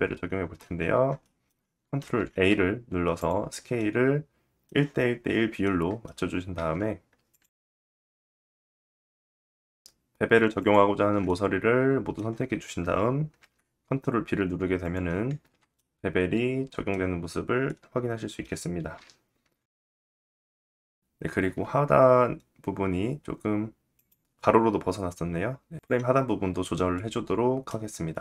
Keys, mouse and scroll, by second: 0.4 scroll up 2, 0.8 shift+middle click, 1.5 ctrl+a, 3.3 middle click, 4.1 middle click, 6.1 Tab, 6.1 middle click, 6.8 click, 6.9 middle click, 7.6 alt+click, 7.8 alt+middle click, 8.0 alt+shift+click, 8.3 alt+shift+middle click, 8.4 alt+shift+click, 8.5 alt+shift+middle click, 9.1 middle click, 10.1 alt+shift+click, 10.8 middle click, 12.9 ctrl+b, 14.9 Tab, 14.9-19.4 middle drag, 16.7-17.2 scroll down 2, 18.5 /, 19.0-19.4 scroll down 2, 19.9 middle click, 20.1 click, 20.2 middle click, 21.1-27.1 middle drag, 27.1 click, 27.3-28.2 middle drag.